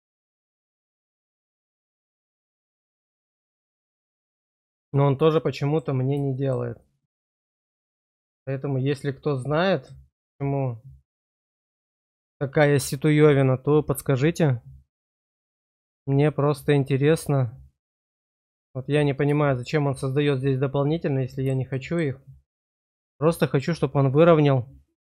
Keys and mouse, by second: 6.3 shift+click, 6.8-7.9 drag, 8.6-9.8 drag, 10.2-12.1 drag, 12.3 shift+click, 19.3 shift+click, 20.9 click, 21.7 shift+click.